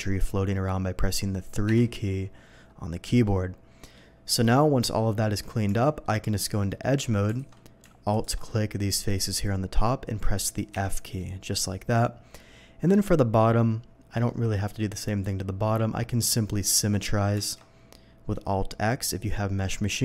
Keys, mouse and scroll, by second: 0.0 Tab, 1.7 3, 3.2 middle click, 3.2 3, 4.2 middle click, 5.2 middle click, 5.7 Tab, 6.0 middle click, 6.6 middle click, 7.3 alt+a, 8.1 alt+a, 8.1 alt+click, 8.5 alt+middle click, 10.7 f, 11.2-12.9 middle drag, 13.4 middle click, 15.2 middle click, 16.5 middle click, 17.4 alt+x.